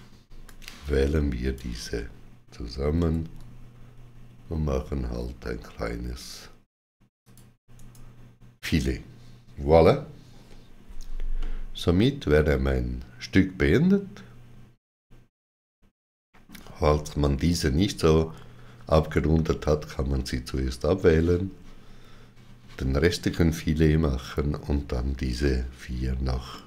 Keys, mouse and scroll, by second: 0.3 click, 2.8 d, 7.0 shift+click, 7.5 right click, 10.2 right click, 10.2 shift+click, 10.2 shift+w, 11.2 middle click, 26.3 middle click.